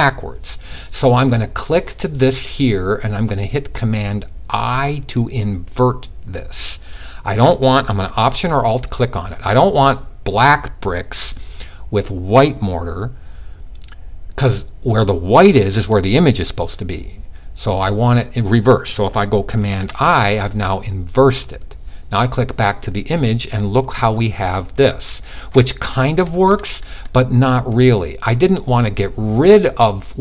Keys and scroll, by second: 19.2 super+i.